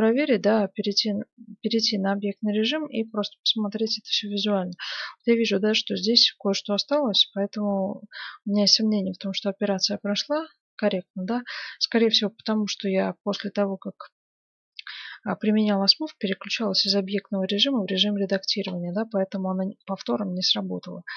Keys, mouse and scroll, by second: 0.4 Tab, 3.2-7.8 middle drag, 7.7 Tab, 8.7 Tab, 8.7 middle click, 10.0-12.9 middle drag, 18.9-20.7 middle drag, 20.9 Tab.